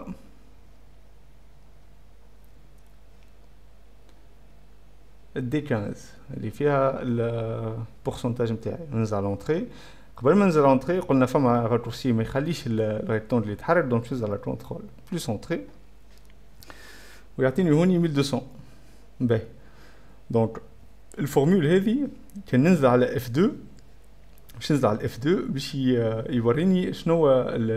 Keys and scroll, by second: 0.0-0.8 typing, 2.6 shift+8, 3.2 F3, 6.4-7.2 typing, 7.5 Return, 9.3-11.1 typing, 15.4 ctrl+Return, 22.7 F2, 23.9 Escape, 24.1 F2, 25.1 F1.